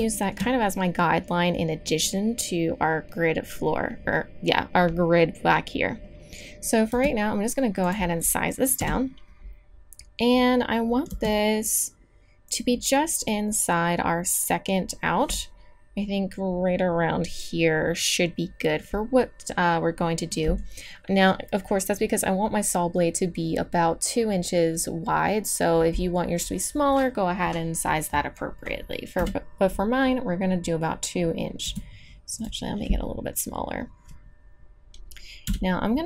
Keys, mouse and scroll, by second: 6.9 s, 8.8 KP_Decimal, 11.1 s, 20.7-28.7 drag, 29.1 KP_3, 31.6 s, 35.4 KP_1.